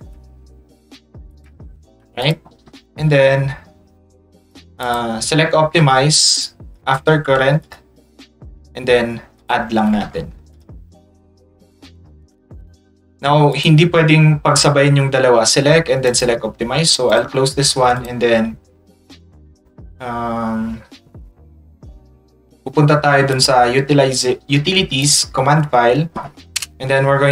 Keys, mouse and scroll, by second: 0.9 ctrl+click, 2.2 click, 4.4 click, 4.8 click, 6.2-7.2 ctrl+drag, 7.6 click, 9.4 click, 10.5 click, 13.5 click, 16.1 click, 17.1 click, 18.0 click, 23.3 click, 25.0 click.